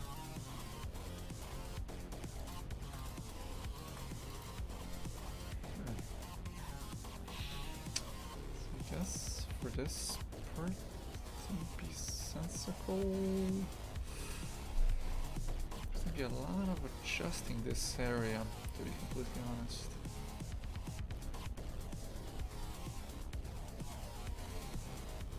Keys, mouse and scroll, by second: 0.0-3.0 right drag, 3.7 shift+right click, 3.9 f, 4.2-9.0 right drag, 9.8 shift+right click, 13.9 f, 17.1 shift+f.